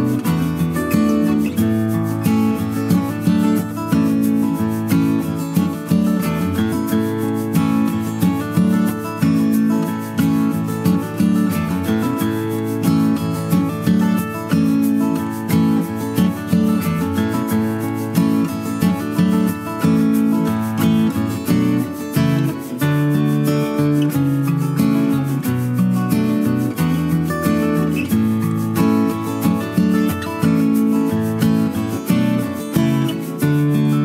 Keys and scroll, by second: 9.2 ctrl+a, 10.0 ctrl+x, 11.5 ctrl+v, 22.3 ctrl+a.